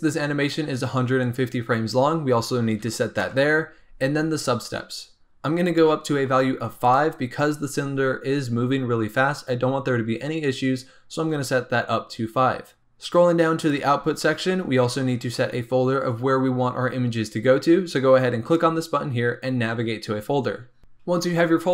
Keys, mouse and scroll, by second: 1.2-4.2 drag, 5.6-6.9 drag, 12.8-13.6 scroll down 8, 13.6 click, 13.9-16.7 scroll down 9, 18.4 click.